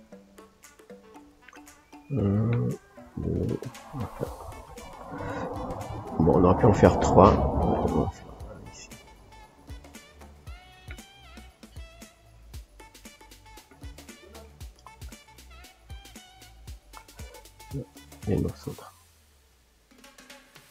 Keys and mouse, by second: 7.4-11.0 drag, 11.0-12.1 shift+middle drag, 12.1-13.3 drag, 13.3-17.8 middle drag, 17.8-20.7 drag.